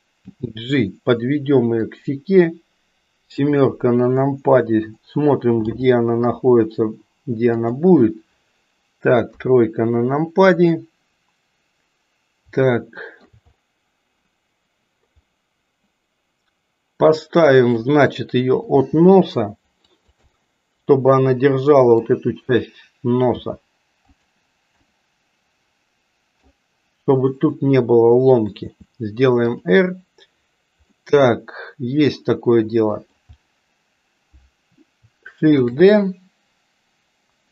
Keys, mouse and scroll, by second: 0.2 g, 3.3 KP_7, 5.6 g, 9.3 KP_3, 12.7 shift+middle click, 15.3-17.0 middle drag, 18.7 g, 20.3-22.1 middle drag, 23.3 g, 25.1-26.4 middle drag, 28.5 r, 30.9-33.2 middle drag, 35.5 shift+d.